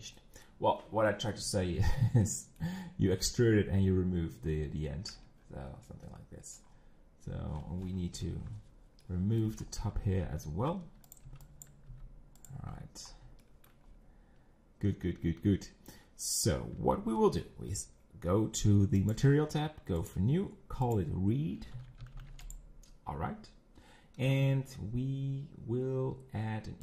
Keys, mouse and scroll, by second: 0.2-1.9 middle drag, 1.9 z, 2.2-4.5 middle drag, 4.5 scroll down 4, 5.1 Tab, 5.4 scroll down 3, 5.9 middle click, 6.7 scroll up 5, 8.1 KP_1, 9.0 shift+middle click, 9.5 scroll up 4, 9.8 Tab, 10.7 z, 11.2 click, 11.6 b, 12.5 x, 12.7-13.3 scroll down 13, 13.4 shift+middle click, 13.8-15.2 scroll up 5, 15.2-15.6 scroll up 1, 16.8 Tab, 20.2 click, 22.4 e.